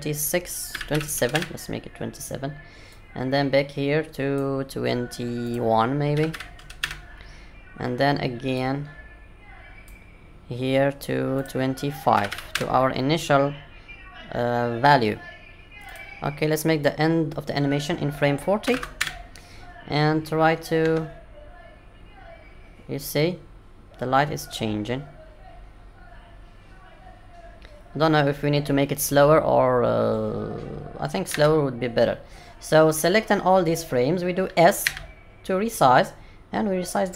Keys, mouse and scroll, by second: 2.9 click, 8.5 click, 11.3 click, 15.8 click, 20.8 space, 31.3 space, 34.8 s.